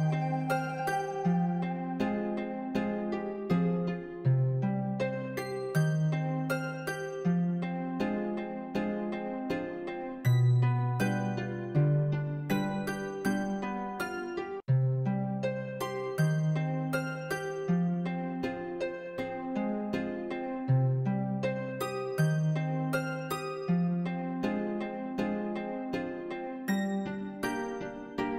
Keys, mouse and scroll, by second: 0.0 n, 0.3 s, 1.2 g, 2.1 alt+d, 2.8 click, 2.9 alt+d, 3.3 g, 4.1 click, 4.3 ctrl+m, 5.1 ctrl+m, 5.6 click, 5.6 middle click, 5.7 scroll down 6, 5.9-6.9 middle drag, 6.9 click, 7.1 middle click, 7.4 g, 8.9 click, 9.0-10.7 middle drag, 10.7 click, 10.7 shift+middle click, 10.9 click, 11.0-11.5 middle drag, 11.5 Tab, 11.7 alt+z, 11.8 click, 12.0 f, 12.1 Tab, 12.2 middle click, 12.4 Tab, 12.5 Left, 12.6 alt+z, 12.8 g, 13.6 s, 13.9 e, 15.0-18.5 typing, 19.1 middle click, 19.4 Tab, 19.6-20.6 drag, 20.6-21.3 middle drag, 21.3-21.9 scroll down 3, 21.9 click, 22.5-25.4 typing, 23.0-23.3 scroll up 5, 26.0 Tab, 26.2-26.7 shift+middle drag, 26.7 shift+d, 27.2-27.8 shift+middle drag, 27.8 scroll down 2, 28.0 middle drag, 28.2 scroll up 2, 28.3 Tab.